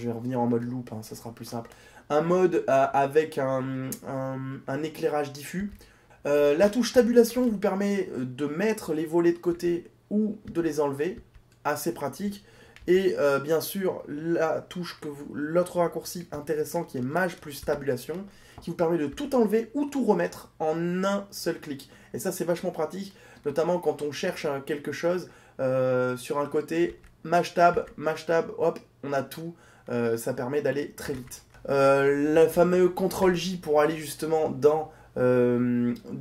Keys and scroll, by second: 6.1 Tab, 17.4 shift+Tab, 33.1 ctrl+j.